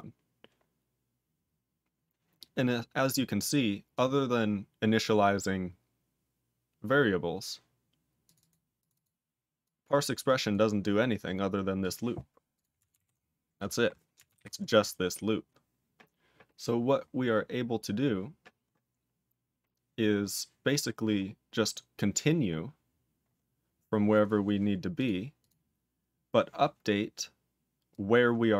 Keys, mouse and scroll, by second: 0.3-2.9 scroll up 13, 3.9 click, 5.0 click, 8.2 click, 8.3 double click, 8.8 click, 8.9 double click, 9.6 click, 10.2 click, 10.5 click, 11.8 click, 12.5 click, 12.9 ctrl+alt+f, 14.3 ctrl+alt+b, 15.2 scroll down 2, 17.0-17.6 scroll down 5, 19.0-20.1 scroll down 4, 20.1-20.6 scroll up 12, 20.6 scroll down 14, 22.2-24.2 scroll down 19, 24.9 click, 25.3 click, 27.9 click.